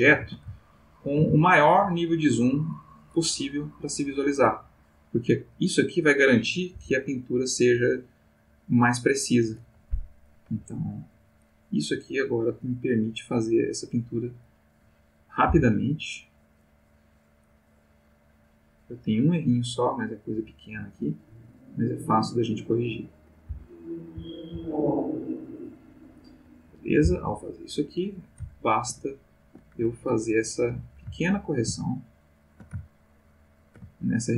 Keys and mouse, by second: 0.6 ctrl+shift+middle click, 1.4 ctrl+shift+middle click, 4.4 click, 6.7 Right, 7.2 click, 10.2 click, 11.4 click, 12.0 click, 12.6 click, 13.5 click, 14.4 click, 15.5 Left, 16.1 click, 16.6 click, 17.4 click, 18.4 click, 21.6 click, 22.6 click, 23.5 Left, 24.2 Right, 25.4 click, 27.0 Left, 28.5-29.7 ctrl+middle drag, 30.5 click, 31.2 ctrl+middle click, 32.0 ctrl+shift+middle click, 32.8-34.3 ctrl+shift+middle drag.